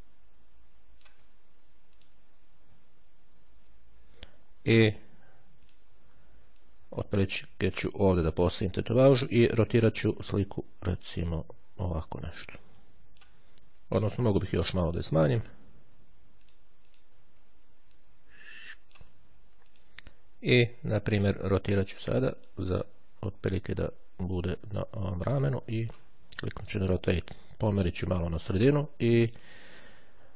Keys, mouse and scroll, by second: 0.0-1.7 ctrl+drag, 2.2 click, 2.5-3.4 ctrl+scroll up 2, 5.8 click, 6.7-9.0 drag, 10.0 click, 11.4-13.6 drag, 13.6 ctrl+z, 16.6-17.6 drag, 18.0-19.6 ctrl+drag, 19.8 click, 22.4 click, 23.8-26.6 drag, 26.8 click, 27.8 click, 28.6-30.1 drag.